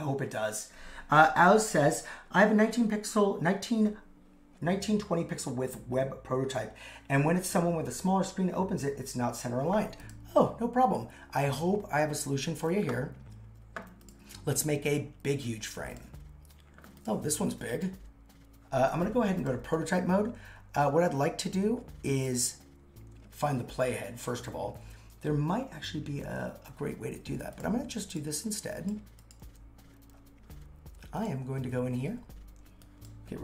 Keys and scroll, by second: 29.4 super+c.